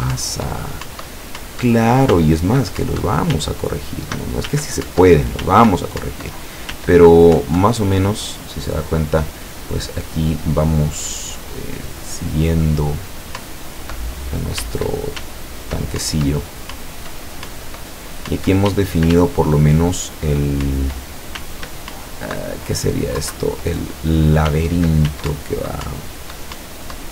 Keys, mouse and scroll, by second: 0.2 Up, 2.2 s, 2.9 Up, 3.4 s, 5.0 Up, 5.5 s, 6.1 Up, 6.8 s, 7.5 Up, 13.4 Up, 14.7 w, 15.2 s, 16.0 Up, 18.8 w, 19.2 s, 20.7 Up, 21.5 s, 21.9 Up, 23.2 Down, 24.5 s, 25.4 Up.